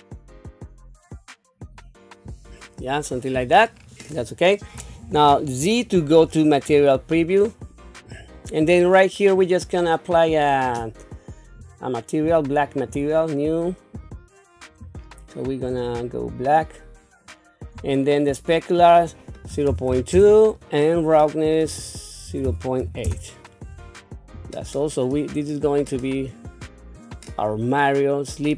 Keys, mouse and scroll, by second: 2.6-3.3 scroll down 4, 3.7 scroll up 2, 5.1 z, 11.4 click, 12.6 click, 14.0 click, 18.7-20.1 drag, 21.6-23.1 drag, 24.5 click, 25.3-25.7 scroll down 2, 25.9-28.5 middle drag.